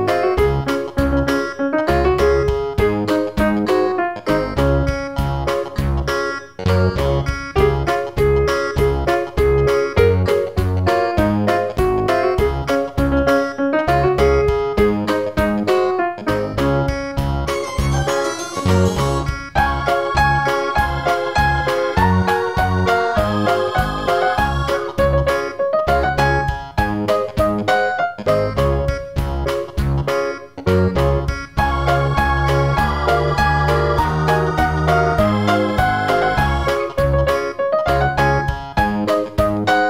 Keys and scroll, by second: 20.2 super+c, 25.6 super+v.